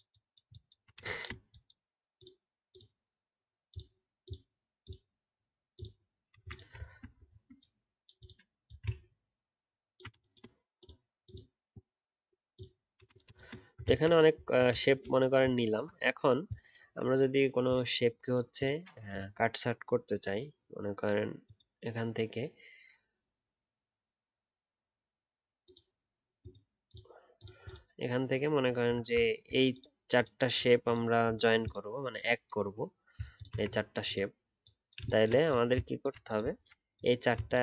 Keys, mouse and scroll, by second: 0.1 alt+double click, 0.5 alt+click, 6.8-7.3 alt+scroll down 3, 7.2 alt+scroll up 1, 13.8-14.4 alt+scroll down 2, 14.4-14.7 alt+scroll up 1, 15.7-18.7 alt+scroll up 1, 29.3 alt+scroll up 3, 31.3-33.3 alt+scroll down 1, 33.3 shift+click, 33.7 alt+scroll down 2, 35.4 alt+click, 36.6 alt+scroll up 2, 37.4 shift+click.